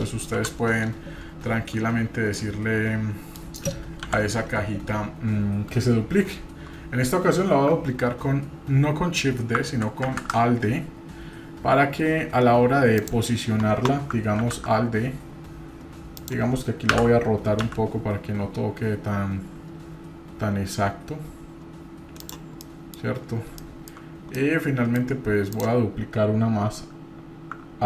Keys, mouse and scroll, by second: 0.4 KP_7, 0.8-1.2 scroll down 1, 1.2-1.9 scroll up 1, 1.9-2.4 scroll up 1, 2.4-3.4 middle drag, 4.0 KP_7, 7.1-7.6 scroll up 1, 17.0 b, 22.6-22.9 middle drag, 23.6-23.9 shift+middle drag, 24.1 scroll up 2, 24.3-24.9 middle drag, 25.5-25.9 drag.